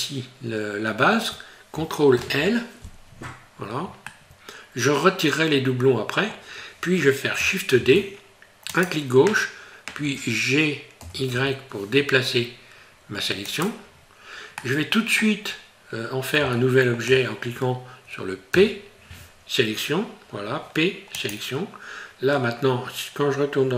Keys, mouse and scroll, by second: 2.2 ctrl+l, 3.2 scroll down 4, 4.1 middle click, 5.7 middle click, 7.8 shift+d, 13.8-14.2 scroll down 2, 14.6 middle click, 14.6 scroll down 2, 15.5 scroll up 2, 16.6 shift+middle click, 18.5 p.